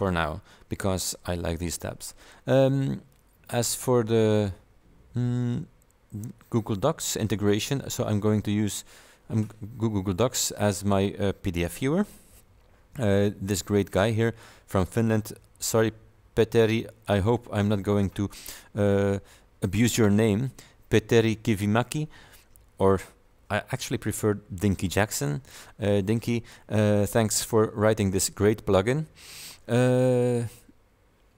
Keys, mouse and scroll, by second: 7.6 click, 15.0 click, 17.0 click.